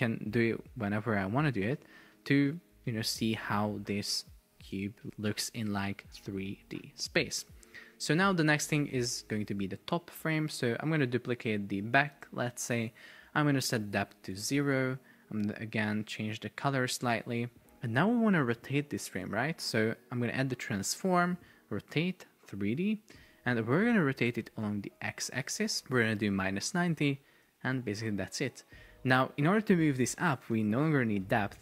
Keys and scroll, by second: 0.4 shift+Up, 0.9 shift+Down, 1.2 shift+Up, 2.8 shift+Down, 5.1 shift+Down, 5.2 shift+Up, 6.1 shift+Down, 7.4 shift+Up, 12.2 super+d, 14.2 Return, 25.1 shift+Down.